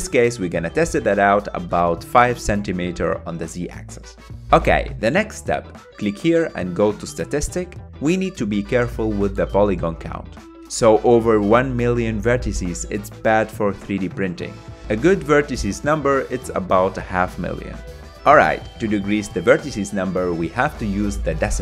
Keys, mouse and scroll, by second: 3.6 KP_Decimal, 4.8-5.1 scroll down 3, 5.1-8.0 middle drag, 8.0-11.1 drag, 12.8-14.9 middle drag, 14.9-15.4 scroll up 1, 15.4-19.1 shift+middle drag.